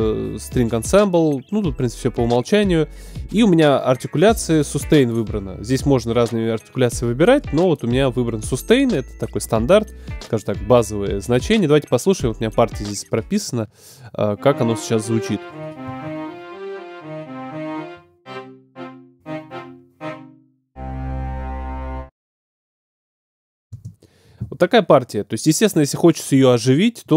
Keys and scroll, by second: 15.8 space, 23.7 space.